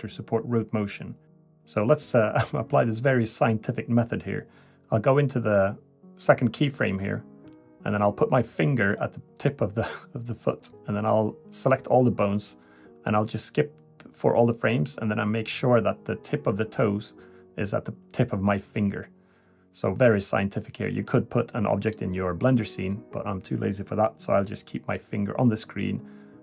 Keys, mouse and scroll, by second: 0.3 KP_3, 1.0-1.3 scroll up 4, 1.3 a, 1.5 scroll down 1, 4.5 click, 9.9 click, 12.1 click, 14.0 click, 15.4 click, 18.5 click, 20.2 click, 23.2 click, 24.8 click.